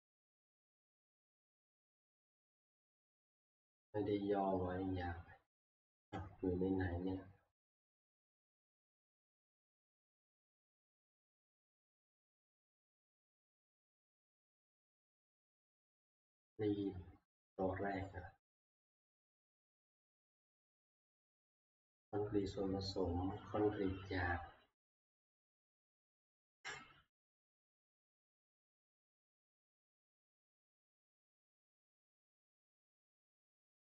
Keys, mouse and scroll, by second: 9.0 click, 10.1 click, 10.6 click, 13.6 click, 14.6-15.4 scroll down 2, 15.4 scroll up 2, 15.7-17.5 scroll, 18.1 click, 20.1 click, 20.2 click, 21.2 click.